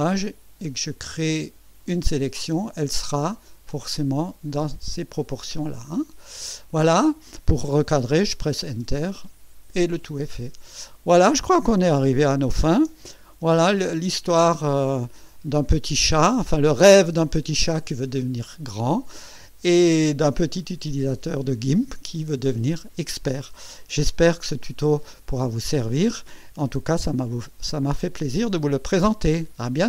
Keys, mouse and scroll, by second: 3.5-6.3 drag, 8.7 Return, 12.3 ctrl+scroll up 2, 13.4 Tab, 14.7 ctrl+scroll down 2, 24.0 Tab.